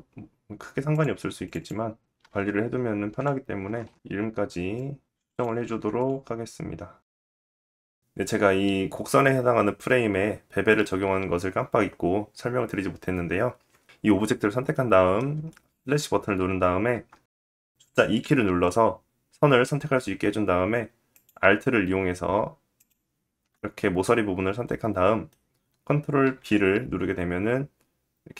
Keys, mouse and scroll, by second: 0.2 Delete, 0.8 ctrl+Delete, 0.9 middle click, 1.5 click, 2.2 middle click, 2.7 ctrl+click, 2.8 middle click, 2.9-5.7 drag, 3.6 middle click, 5.1 BackSpace, 5.7 middle click, 5.8-7.5 drag, 6.5 middle click, 7.5 middle click, 7.6 click, 7.9-14.0 middle drag, 14.0 /, 15.2 middle click, 15.9 shift+middle click, 16.4-17.0 scroll up 2, 17.4 Tab, 20.7 alt+click, 22.3 alt+shift+click, 23.6 middle click, 25.8 ctrl+b.